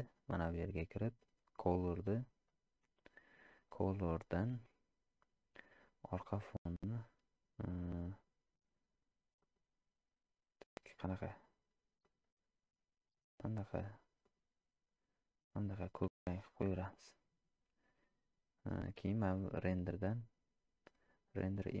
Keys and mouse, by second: 0.3 click, 1.8 click, 19.3-21.8 drag.